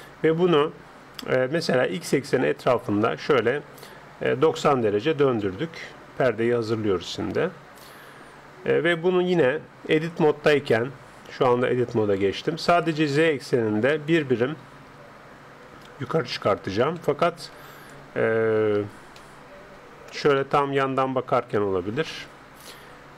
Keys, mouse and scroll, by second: 1.9 r, 7.1-8.9 middle drag, 10.1 Tab, 13.3-15.0 drag, 19.1-20.8 middle drag, 20.4 KP_3.